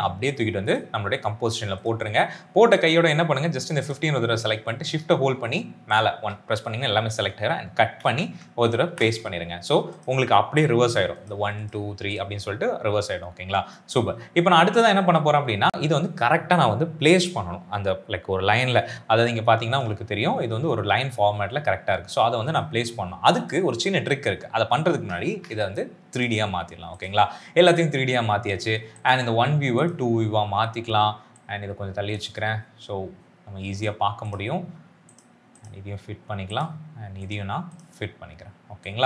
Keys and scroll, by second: 7.9 ctrl+x, 8.8 ctrl+v, 25.2 ctrl+a.